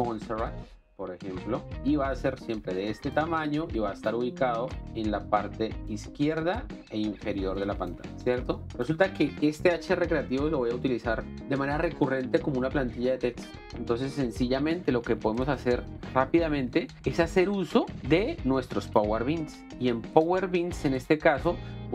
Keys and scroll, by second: 0.3 m, 8.1 z.